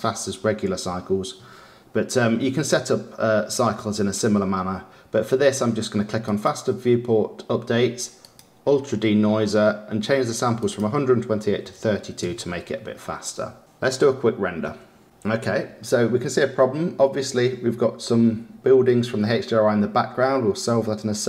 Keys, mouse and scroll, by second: 6.3 click, 8.2 click, 10.5-13.6 drag, 13.6 ctrl+s.